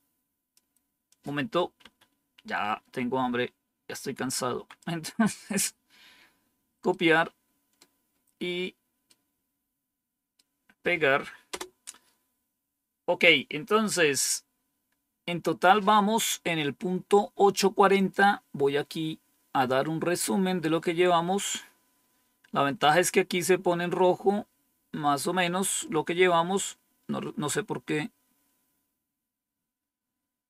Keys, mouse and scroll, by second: 1.7 Up, 4.3 Down, 6.8-8.3 right drag, 8.9-10.3 right drag, 11.4 Return, 17.8 click, 19.6 scroll down 1, 20.7-22.4 scroll down 2, 22.5-24.7 scroll down 2, 24.7-25.4 scroll down 1.